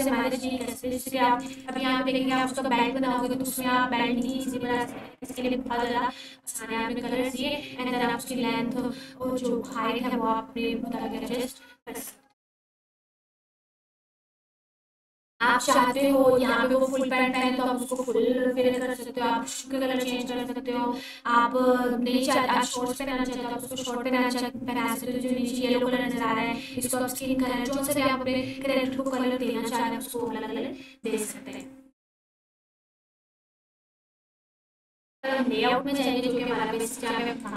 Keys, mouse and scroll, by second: 0.6-1.6 ctrl+alt+drag, 15.9-17.2 drag, 17.3-18.0 ctrl+alt+drag, 35.0 click, 37.4 click.